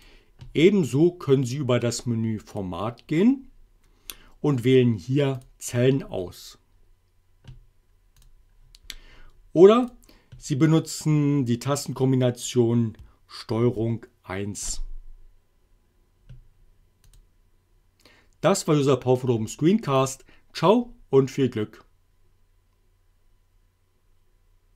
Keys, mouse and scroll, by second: 0.1 click, 2.6 click, 5.4 click, 8.3 click, 10.0 click, 13.5 ctrl+1, 17.1 click, 20.0 click.